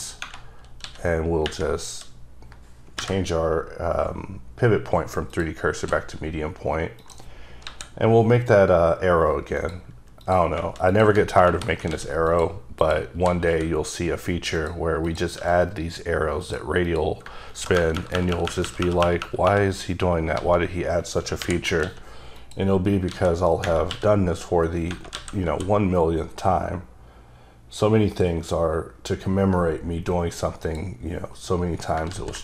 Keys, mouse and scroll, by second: 0.0 right click, 0.8 s, 5.3 click, 7.0 click, 7.6 KP_7, 8.4-9.5 scroll down 1, 9.5 click, 10.2 click, 11.0 click, 11.4 ctrl+KP_Add, 11.9 x, 12.3 click, 12.8 click, 13.5 e, 14.5 click, 15.0 click, 15.4 e, 16.4 click, 16.8 click, 17.5 ctrl+KP_Enter, 17.7 ctrl+KP_Add, 17.9 ctrl+KP_Add, 18.3 ctrl+KP_Add, 18.4 ctrl+KP_Add, 18.8 ctrl+KP_Add, 19.0 ctrl+KP_Add, 19.4 ctrl+KP_Add, 20.3 ctrl+z, 21.8 x, 22.3 click, 23.0 a, 23.9 q, 25.1 a, 27.7 typing, 30.8 click, 32.1 z.